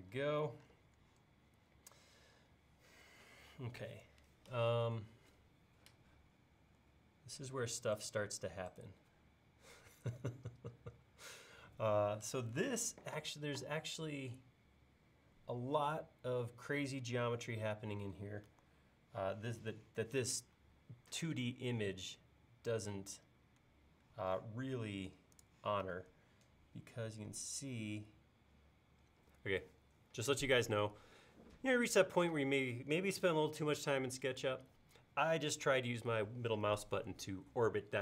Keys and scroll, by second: 0.2 l, 21.8 super+Tab.